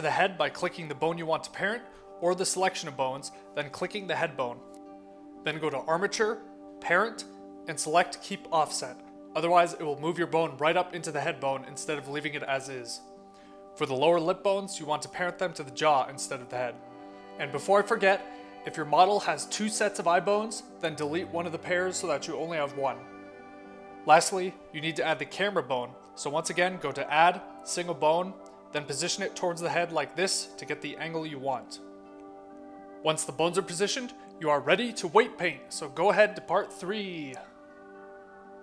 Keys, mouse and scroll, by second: 0.4 click, 0.8 shift+click, 1.0 shift+click, 1.2 shift+click, 1.6 middle click, 2.7 shift+middle click, 3.3 shift+click, 3.5 shift+click, 3.8 shift+click, 5.1 shift+click, 6.7 click, 9.7 click, 12.6 click, 13.5 click, 14.0 shift+click, 14.4 click, 14.6 click, 15.8 shift+click, 16.9 click, 17.2 click, 17.6 click, 18.3 middle click, 19.2 click, 21.0 click, 21.6 click, 22.4 click, 24.8 click, 26.2 click, 27.3 click, 27.8 click, 28.9 click, 29.3 click, 29.6 click, 30.9 click, 31.1 click, 31.9 click, 32.8 click, 33.2 click, 33.5 middle click, 33.9 middle click, 34.2 click, 34.6 middle click, 36.4 middle click, 36.5 middle click, 37.3 click, 37.7 e.